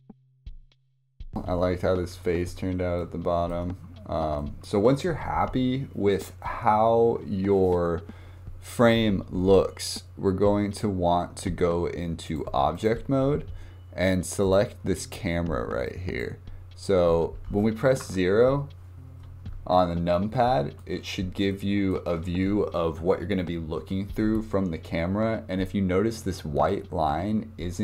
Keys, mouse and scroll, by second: 0.2 click, 0.3 click, 0.6 click, 0.9 scroll up 2, 1.0 scroll down 1, 2.4-3.0 scroll up 2, 3.0 shift+middle click, 3.8-4.4 scroll down 2, 4.4-9.1 shift+middle drag, 12.2-14.5 drag, 15.9 click, 16.8-17.1 scroll down 3, 17.2-18.0 scroll up 2, 18.0 KP_0, 20.3-21.1 shift+middle drag, 21.1 scroll down 2, 21.5-24.5 shift+middle drag.